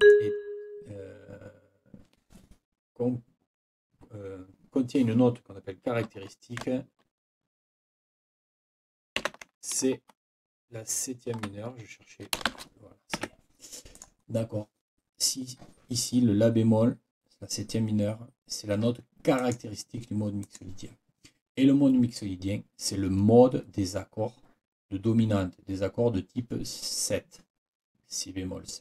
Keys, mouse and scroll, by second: 0.0 click, 9.2 ctrl+t, 12.5 shift+c, 13.2 Escape, 13.9 click, 19.4 click, 20.4 click.